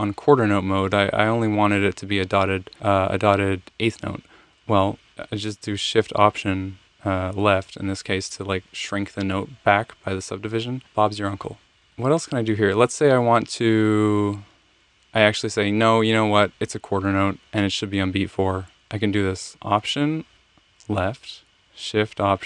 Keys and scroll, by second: 6.8 alt+shift+Left, 11.7 Escape, 11.7 Left, 11.8 Right, 20.1 alt+Left.